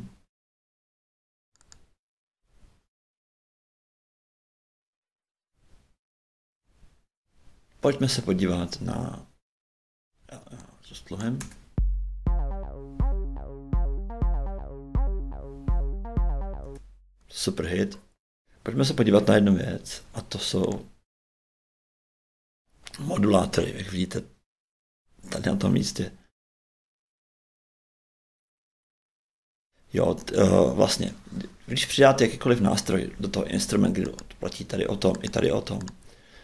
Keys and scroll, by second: 11.4 shift+space, 16.6 shift+space.